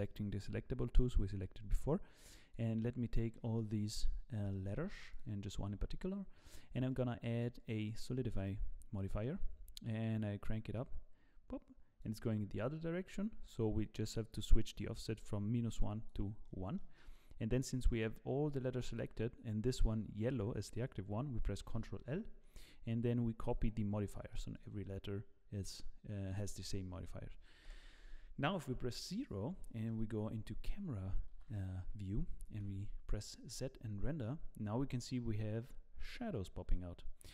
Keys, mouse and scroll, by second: 2.3 click, 3.3 middle click, 4.1 scroll up 2, 4.5 shift+middle click, 5.1 shift+click, 5.9-6.4 scroll up 2, 6.9 click, 8.9 middle click, 10.7 click, 14.5 click, 16.4 middle click, 17.8 middle click, 21.7 ctrl+l, 24.1 middle click, 24.5 click, 24.8 middle click, 27.6 KP_0, 28.6 scroll up 2, 29.5 scroll up 1, 29.6 shift+middle click, 31.3 ctrl+s, 32.5 z.